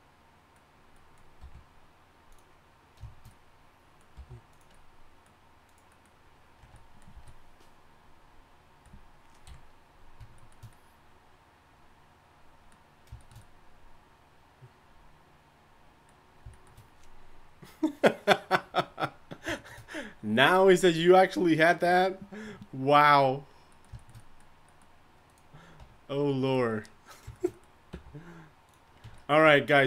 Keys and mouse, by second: 1.4 r, 4.2 g, 6.6 Tab, 6.6 g, 7.1 a, 9.5 KP_1, 25.3-27.5 right drag, 25.8 Tab, 27.6 right click, 27.9 r, 29.0 Tab.